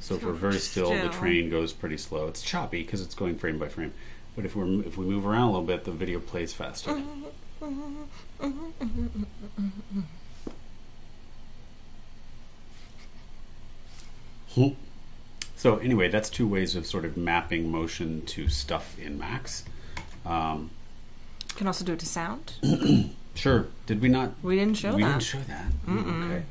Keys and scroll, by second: 25.3 super+e.